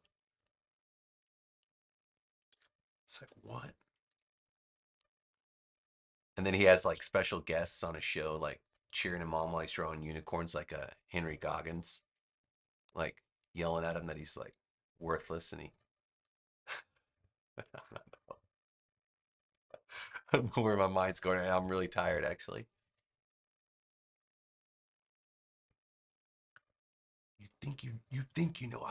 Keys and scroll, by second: 3.1 BackSpace, 4.0 v, 21.6 a.